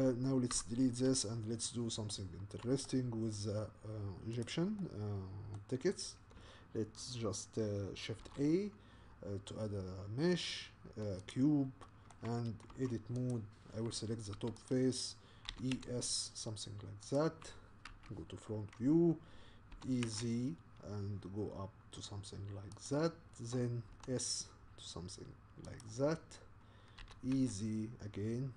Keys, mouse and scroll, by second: 0.5 Delete, 1.6-2.1 scroll down 4, 2.1-3.1 shift+middle drag, 3.1 scroll up 2, 4.4 click, 4.8-11.3 middle drag, 11.8 middle click, 12.7 Tab, 13.3 click, 14.3 3, 14.7 click, 15.5 e, 17.9 KP_1, 19.7 e, 23.9 s, 26.1-26.8 scroll down 1, 26.8 scroll down 1, 27.0 e.